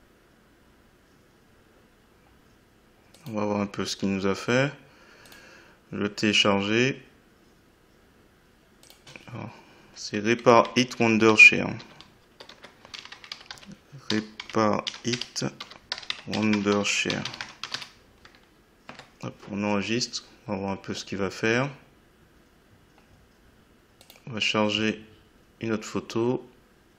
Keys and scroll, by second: 10.4 Right, 11.3 Left, 11.8-13.6 typing, 15.1-16.6 typing, 17.7 e, 18.8 Return.